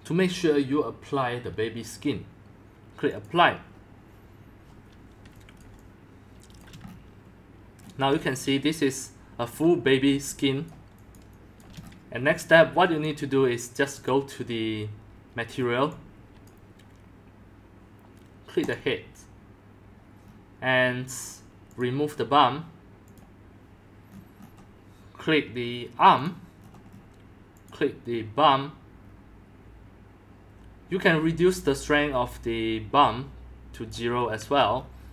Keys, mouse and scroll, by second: 3.2-5.3 drag, 5.3 middle click, 5.3 x, 5.6 click, 5.7 c, 6.3-6.8 c, 6.8 click, 7.0-9.2 shift+middle drag, 7.9-12.8 typing, 9.5-11.8 drag, 11.9 shift+click, 12.2 shift+scroll, 13.1-15.5 drag, 15.5-16.5 scroll down 5, 15.9 x, 16.5-20.2 drag, 20.2-22.3 scroll down 10, 21.8-22.1 drag, 22.3 scroll, 22.7-23.1 scroll down 1, 23.1-24.0 drag, 24.0-26.2 scroll up 10, 26.2 click, 26.6-30.4 scroll down 15, 27.6-28.1 drag, 31.1-32.0 drag, 32.2-33.4 scroll down 9, 33.4 middle click, 33.4 scroll, 33.9 click, 34.7 middle click, 34.7-35.1 scroll.